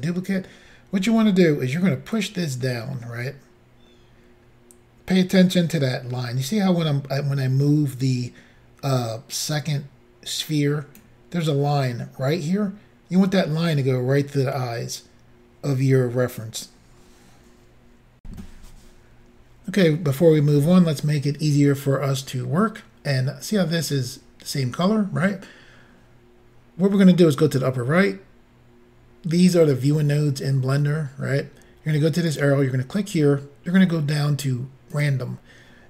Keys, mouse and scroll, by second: 2.2 click, 18.2 Insert, 32.3 click, 35.0 click.